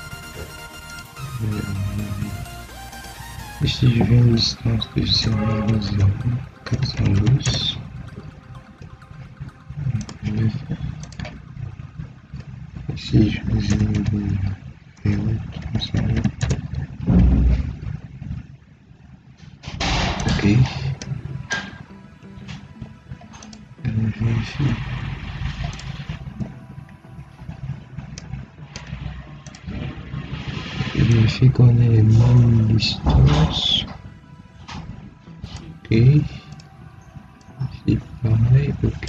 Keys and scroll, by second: 5.1 0, 5.4 ., 5.7 0, 7.3 Return, 13.6 0, 13.8 ., 14.8 0, 16.3 Return, 21.6 Escape, 24.6 Escape, 35.8 Escape.